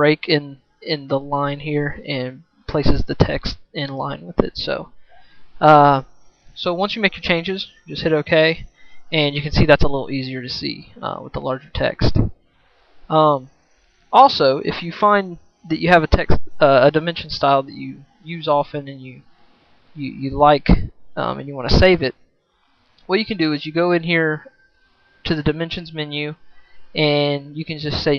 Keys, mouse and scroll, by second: 7.9-15.9 right drag, 16.1 right click, 16.4-19.1 right drag.